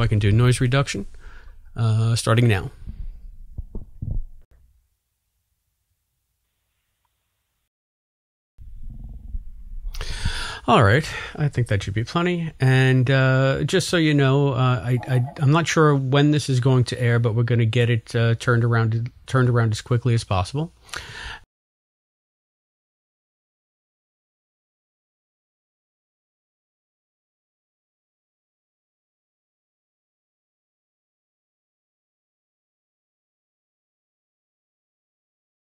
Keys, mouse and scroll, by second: 0.0 click, 0.8 click, 4.1 click, 5.4 click, 6.0 click, 6.9 click, 7.6 space, 8.4 click, 8.5 space, 17.0 ctrl+s, 20.2 click, 21.0 click, 21.3 space, 22.1 ctrl+s, 23.0 click.